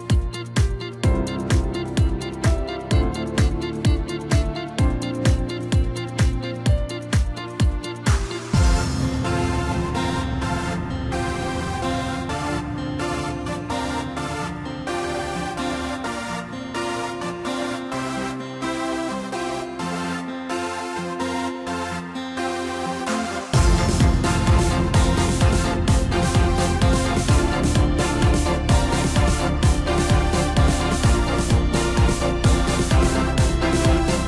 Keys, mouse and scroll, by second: 1.0 click, 2.3 click, 3.5-4.5 scroll up 2, 4.5 click, 5.3-5.9 scroll down 2, 6.8-7.4 drag, 8.0 click, 14.9 click, 20.4 click, 21.2 click, 22.3-22.9 drag, 23.5 click, 29.6 click, 31.3-33.3 middle drag, 33.3 KP_0.